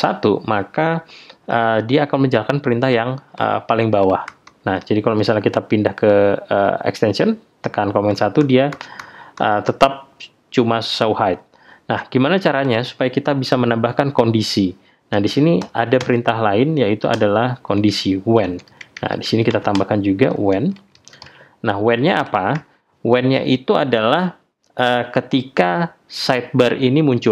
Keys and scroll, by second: 4.2 super+1, 8.1 super+1.